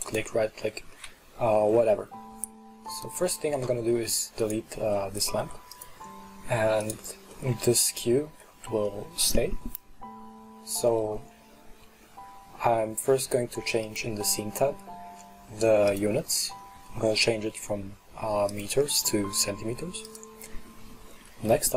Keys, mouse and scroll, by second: 0.1 right click, 0.6 scroll down 2, 1.0-2.1 middle drag, 2.1-2.9 scroll down 1, 2.9-3.4 middle drag, 3.4-4.5 scroll down 2, 4.5 right click, 5.5 x, 6.3-6.9 scroll up 3, 6.9 right click, 7.4-12.1 middle drag, 13.9 click, 16.0 drag, 18.5-21.7 drag.